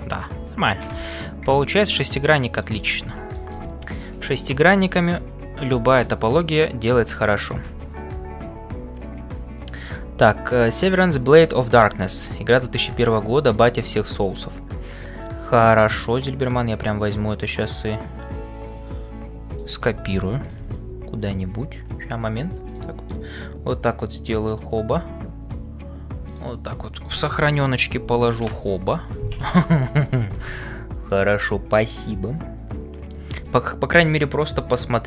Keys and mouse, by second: 0.0-35.0 typing, 0.4 middle click, 2.5 click, 3.1 middle click, 4.2-6.2 middle drag.